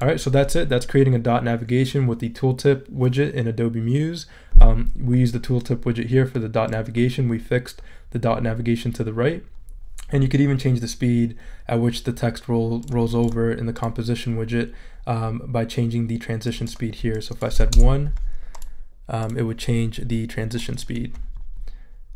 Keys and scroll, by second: 17.5 |, 17.7 Return.